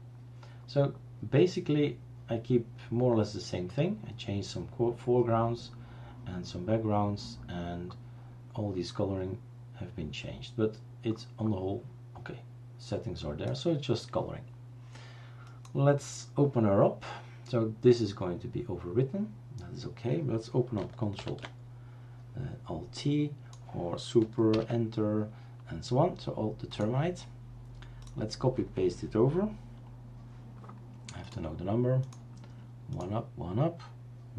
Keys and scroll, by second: 21.2 ctrl+alt+t, 24.5 super+Return.